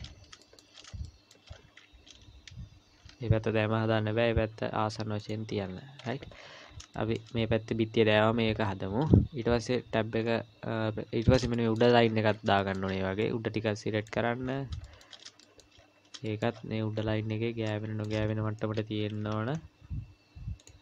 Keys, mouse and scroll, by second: 0.0-0.4 scroll up 3, 0.4 shift+middle click, 0.9 scroll up 1, 1.0 shift+middle click, 1.5-2.5 scroll up 1, 2.5 scroll up 1, 2.9 g, 5.5-6.9 scroll down 17, 6.9 shift+middle click, 10.2-10.8 scroll up 4, 11.1-11.5 scroll up 4, 11.5 shift+middle click, 12.0-12.6 scroll down 9, 12.6 shift+middle click, 13.2 click, 14.4-15.2 scroll up 9, 15.4 shift+middle click, 15.8-16.1 scroll up 2, 16.3 shift+middle click, 16.5-17.9 scroll up 9, 17.9 shift+middle click, 19.0 g.